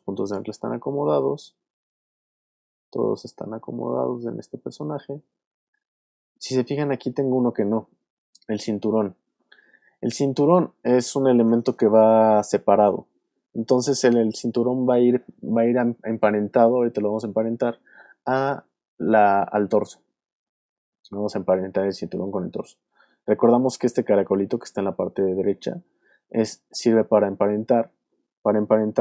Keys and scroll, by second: 2.3 super+Up, 2.8 super+Down, 6.4 super+Up.